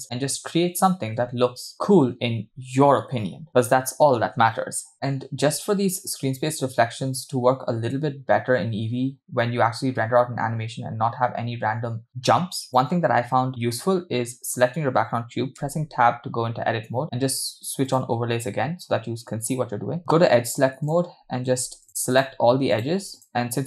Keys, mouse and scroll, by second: 2.9 space, 12.7 click, 15.7 Tab, 18.1 click, 19.4 click, 20.0 click, 20.9 click, 22.2 alt+shift+click, 22.8 shift+click, 23.2 shift+click.